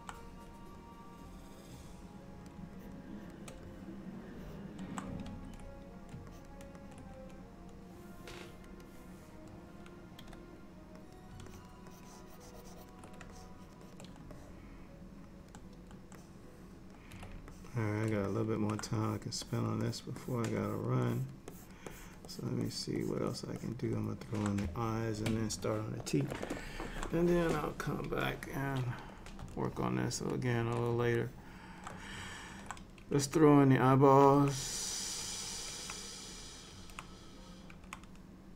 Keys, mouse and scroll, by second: 1.2 click, 2.9 shift+click, 3.4 shift+click, 3.8 middle click, 5.4 ctrl+z, 6.4 ctrl+click, 6.9 ctrl+click, 8.9 click, 10.2 f, 11.6 ctrl+click, 12.0 ctrl+click, 13.4 shift+click, 13.9 shift+click, 14.4 middle click, 16.3 middle click, 17.6 shift+middle click, 17.7 shift+middle click, 18.3 ctrl+middle click, 19.1 click, 19.5 click, 19.9 click, 20.3 click, 20.7 click, 21.1 click, 21.6 click, 22.0 click, 22.3 click, 22.7 click, 23.1 click, 23.4 click, 23.6 click, 24.9 alt+middle click, 27.9 KP_1, 29.8 ctrl+middle click, 31.3 shift+middle click, 33.3 Tab, 34.4 Tab, 35.4 Tab, 35.8 Tab, 36.9 Tab, 37.9 Tab.